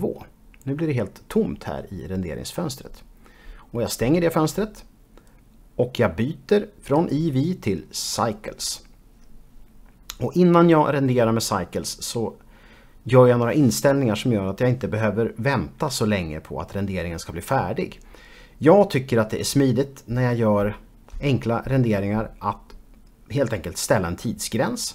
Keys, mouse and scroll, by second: 0.3 click, 3.9 click.